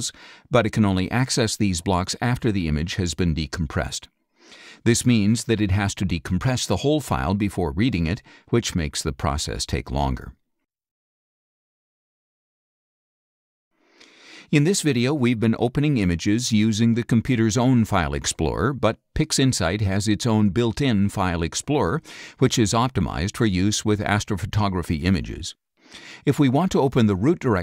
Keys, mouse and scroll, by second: 12.1 click, 18.2 click, 18.3 click.